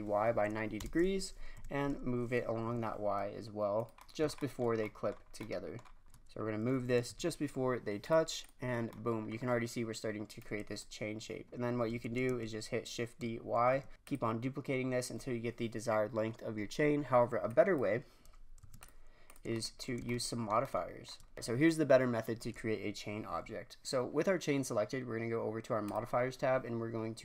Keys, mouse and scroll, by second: 1.5 g, 5.2-5.9 scroll down 3, 5.9-6.9 scroll up 5, 6.9 g, 8.4 drag, 8.7-10.4 scroll down 7, 10.4 click, 12.0 shift+d, 14.6-16.1 scroll down 5, 16.9-17.4 scroll up 3, 17.4 click, 18.6 x, 19.2 click, 19.5 shift+scroll down 1, 19.8-20.4 shift+scroll up 2, 20.4-21.0 shift+scroll down 1, 21.0-21.3 shift+scroll down 1, 21.3-23.7 shift+middle drag, 25.8 click.